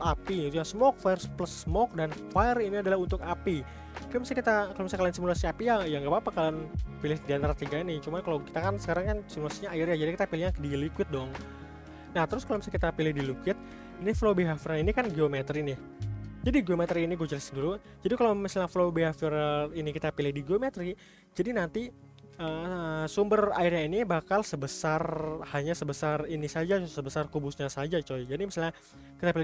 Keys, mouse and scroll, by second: 12.4-15.8 drag, 24.0-24.8 scroll up 5, 24.8-25.6 shift+middle drag, 25.6-27.9 scroll down 1, 27.9-28.4 scroll down 5, 28.4-29.4 shift+middle drag.